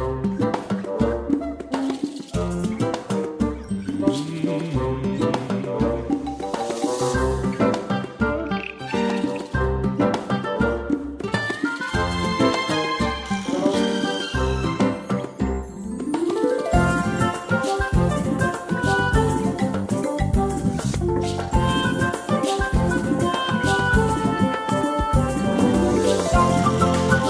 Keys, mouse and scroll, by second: 0.8 c, 1.2 click, 10.1 click, 12.5 c, 13.0 click, 13.9 c, 14.4 click, 14.8 c, 15.1 click, 16.4 c, 16.7 click, 18.6 space, 24.3 click, 25.3 ctrl+scroll up 1, 26.5 click.